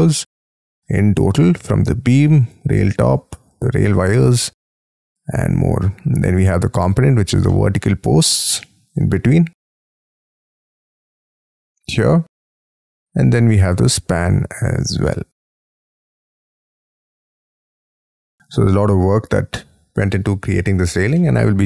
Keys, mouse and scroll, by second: 0.4-3.5 scroll down 6, 3.5 double click, 3.9 double click, 4.1 double click, 4.3 double click, 4.4 double click, 4.6 double click, 7.5 middle click, 8.6 middle click, 9.9 middle click, 10.0-10.6 scroll up 2, 10.6-11.3 scroll down 5, 11.3-14.3 scroll up 9, 17.4 middle click, 18.6-19.7 scroll down 24, 20.0-21.0 scroll up 24, 21.2 middle click, 21.3-21.6 scroll down 7.